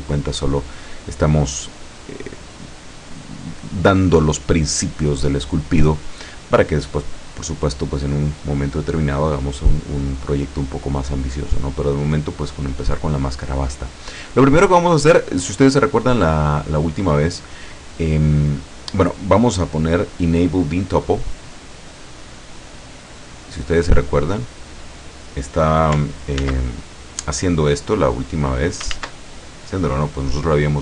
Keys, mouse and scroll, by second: 19.1 scroll down 1, 19.7-20.0 scroll down 1, 21.8 click, 23.4-25.2 drag, 26.4 ctrl+z, 27.3-28.8 drag, 29.0 ctrl+z.